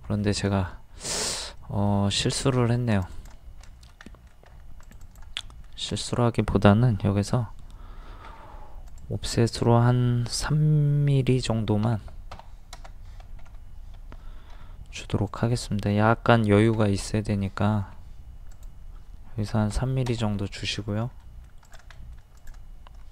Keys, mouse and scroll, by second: 1.6 middle click, 2.9 click, 3.7 shift+middle click, 4.5 scroll up 1, 4.9 click, 5.4 middle click, 5.9 click, 8.3 0, 8.9 click, 11.8 KP_3, 12.3 KP_0, 13.4 ctrl+z, 14.6 o, 15.3 click, 16.4 KP_3, 17.8 ctrl+z, 18.5 click, 19.5 KP_3, 20.5-20.8 scroll up 1, 20.8 scroll down 1, 21.3 middle click, 21.7 click, 22.0 middle click, 22.4 click.